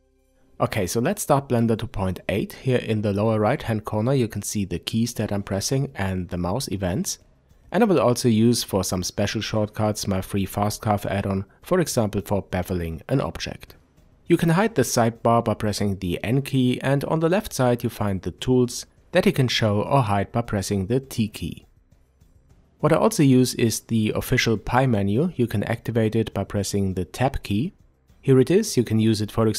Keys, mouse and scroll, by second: 3.2 middle click, 4.2-9.1 middle drag, 6.6 n, 9.1 click, 13.8 n, 16.7 t, 26.7 Tab.